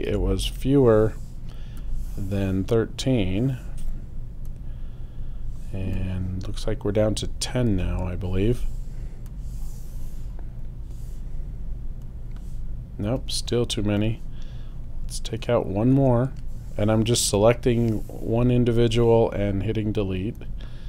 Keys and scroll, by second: 0.1 BackSpace, 7.7 BackSpace, 15.9 BackSpace.